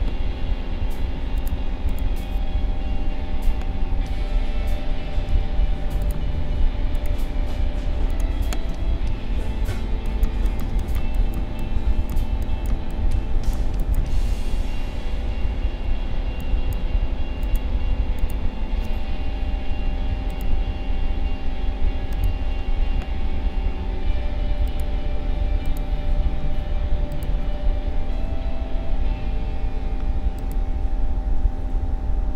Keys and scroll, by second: 3.5 Delete, 5.3 ctrl+z, 8.7 a, 9.9 space, 14.7 ctrl+-, 16.1 space, 23.0 Delete.